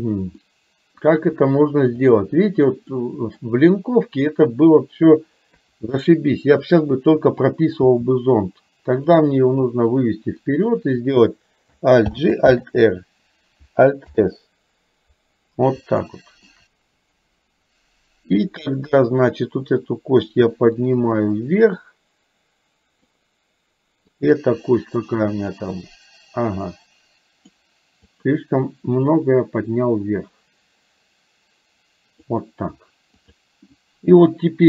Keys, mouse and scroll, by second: 0.5 middle click, 1.0-2.3 scroll down 1, 3.0 middle click, 5.6 KP_2, 6.1 KP_3, 7.8 g, 10.2 click, 12.1 alt+g, 12.6 alt+r, 14.1 alt+s, 16.1 middle click, 21.0-23.1 drag, 25.6-27.6 drag, 29.1 click, 29.3-32.3 drag, 33.3 click.